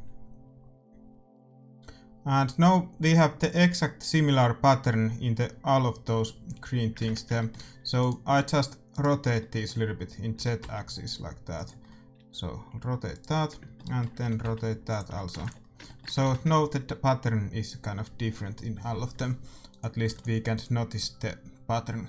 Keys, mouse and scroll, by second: 0.1 shift+z, 7.0 shift+z, 7.3-8.4 middle drag, 7.8 a, 8.4-10.7 right drag, 9.2 a, 10.3 r, 12.1 a, 13.4 right click, 14.1 r, 15.1 a, 15.3 ctrl+s, 17.4 shift+z, 17.7 middle click, 19.9-22.0 drag, 20.1 ctrl+s.